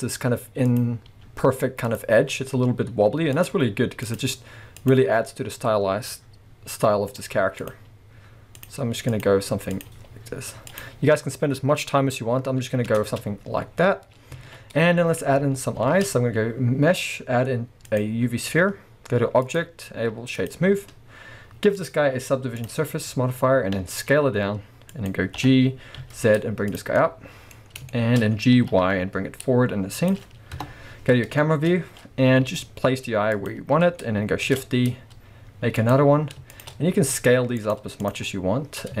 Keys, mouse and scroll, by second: 0.0 click, 0.6 click, 1.1 g, 2.0 click, 3.3 click, 3.5 g, 4.2 click, 4.8 click, 5.0 g, 7.6 click, 7.7 g, 9.1 click, 9.7 click, 9.9 g, 10.8 click, 12.9 Tab, 13.1-13.7 scroll down 1, 13.7-14.4 scroll up 1, 14.4 alt+a, 14.7-15.3 scroll down 2, 15.3-15.8 scroll up 2, 15.8 shift+a, 18.6-19.5 scroll down 2, 19.5-25.1 drag, 23.2-23.8 scroll up 2, 23.8 s, 25.4 g, 26.8 click, 26.9 scroll up 2, 27.0-30.1 middle drag, 27.6-27.9 scroll up 1, 28.5 g, 30.1 click, 30.6 KP_0, 31.4-33.5 shift+middle drag, 31.7 scroll up 1, 32.5 g, 33.5 click, 34.6 shift+d, 35.9 click, 36.5 shift+click, 37.0 s, 38.0 click, 38.3-39.0 middle drag.